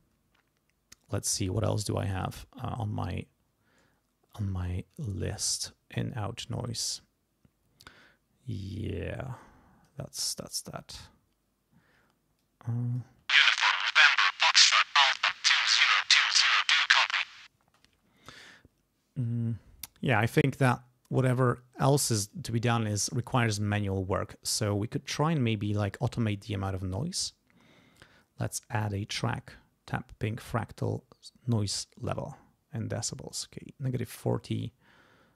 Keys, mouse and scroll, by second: 2.9-3.2 scroll down 2, 8.0-10.0 drag, 12.4 click, 13.0 space, 17.6 space, 20.6-22.5 drag, 25.0 click, 26.9 click, 32.0 click, 33.3 click.